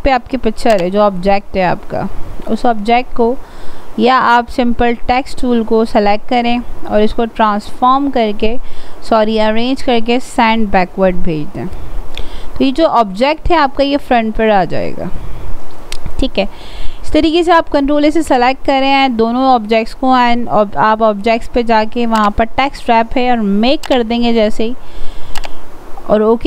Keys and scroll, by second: 17.6 ctrl+a.